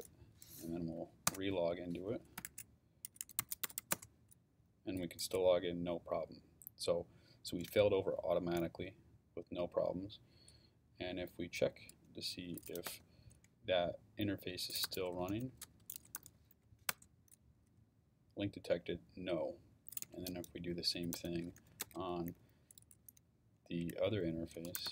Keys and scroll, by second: 1.3 Return, 2.1-4.3 typing, 12.3-13.4 typing, 14.6-17.0 typing, 19.8-22.1 typing, 24.3-24.9 typing.